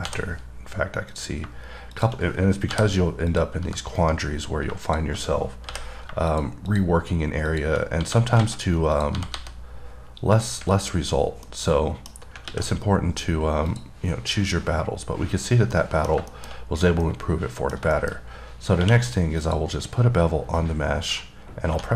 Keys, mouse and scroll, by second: 1.4 click, 2.2 click, 3.6 click, 4.3 right click, 5.1 click, 6.6 click, 6.9 click, 7.7 click, 9.2 click, 10.6 click, 11.1-11.7 scroll down 5, 11.7 middle click, 13.9 click, 16.0 middle click, 16.9-17.3 scroll up 1, 17.3 middle click, 18.2 middle click, 18.4-18.9 scroll up 5, 19.7 click.